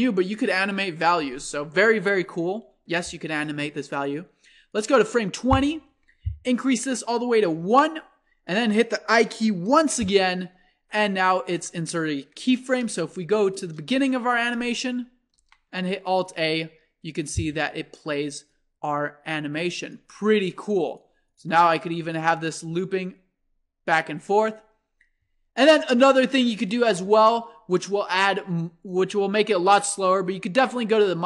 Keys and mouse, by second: 4.8-6.6 drag, 6.8-8.8 drag, 9.8 i, 13.4 shift+Left, 15.3 alt+a, 18.5-20.2 drag, 22.4-24.2 drag, 26.9 alt+a, 28.9-31.2 drag.